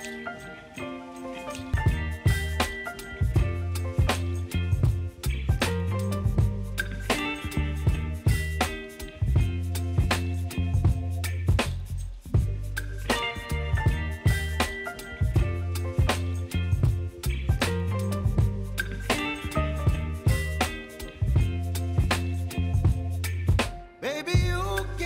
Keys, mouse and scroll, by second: 11.1 click, 11.4 space, 16.2-25.0 drag.